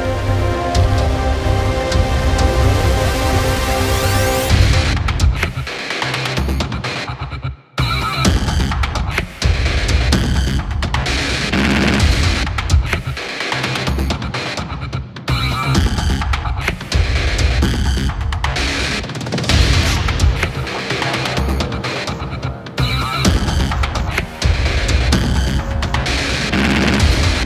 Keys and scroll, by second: 0.1 space, 1.2 super+=, 1.5 space, 4.7 super+=, 5.2 super+=, 7.5 super+=, 7.9 space, 8.0 super+=, 12.3 space, 14.5 space, 16.5 `, 17.2 super+=, 17.4 space.